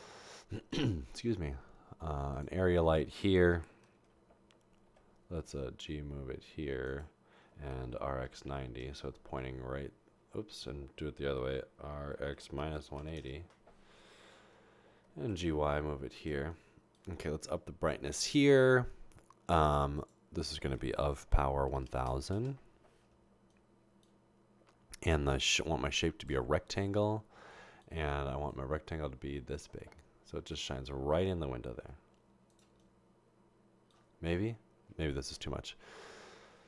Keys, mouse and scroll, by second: 4.1-4.9 typing, 7.9-8.4 typing, 8.7 Return, 11.9-13.2 typing, 15.0-16.7 typing, 20.0 click, 21.8-24.0 typing, 22.4 Return, 25.1-26.3 drag, 31.9 typing, 34.8 typing.